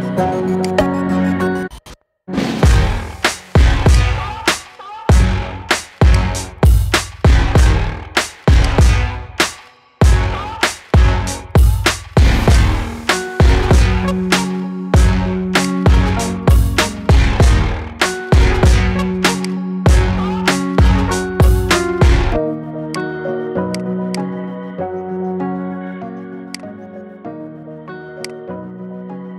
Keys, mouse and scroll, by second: 0.4 click, 1.8 g, 4.0-4.7 scroll down 10, 4.7 middle click, 5.3 scroll down 1, 5.6-6.0 middle drag, 6.0 click, 6.4 scroll up 2, 7.6 scroll down 1, 7.7-8.4 middle drag, 8.4 click, 9.8 KP_7, 11.0 s, 12.6-13.1 scroll up 3, 13.1-13.8 middle drag, 13.8 scroll down 4, 14.9 KP_7, 15.4 click, 16.4 r, 19.7-20.8 scroll up 5, 20.8 r, 23.2 scroll down 2, 23.6 click, 23.9 click, 24.7 g, 27.2 g, 28.8 KP_3.